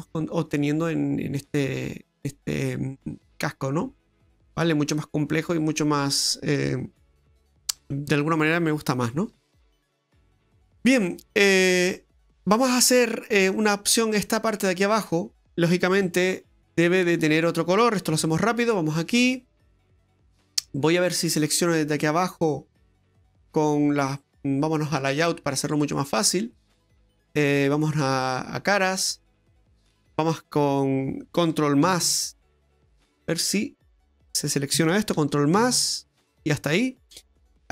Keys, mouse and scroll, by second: 8.8-10.3 scroll up 3, 10.6 middle click, 11.3 middle click, 15.0 right click, 16.0 Tab, 16.6-17.3 scroll up 2, 17.3 right click, 18.1 Tab, 18.5 right click, 19.1 Tab, 20.6 middle click, 22.9 right click, 25.0 click, 25.3 scroll up 2, 25.6 middle click, 26.4-26.8 scroll up 2, 28.6 click, 29.7 alt+shift+right click, 31.9 ctrl+KP_Add, 33.2 scroll down 2, 33.6 middle click, 35.5 ctrl+KP_Add, 36.2 ctrl+KP_Add.